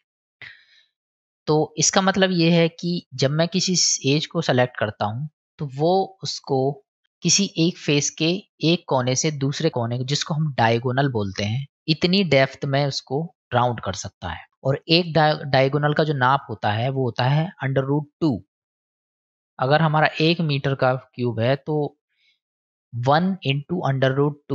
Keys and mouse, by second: 3.7 middle click, 4.8 middle click, 6.9 middle click, 10.4 middle click, 24.1-24.5 middle drag.